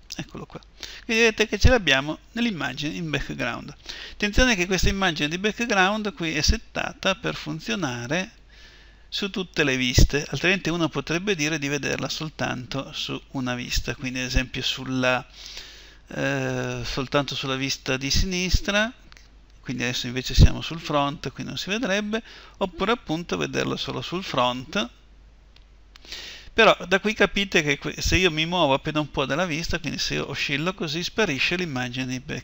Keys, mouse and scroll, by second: 0.0-12.9 drag, 1.0 middle click, 22.3-26.6 drag, 29.8-31.8 middle drag.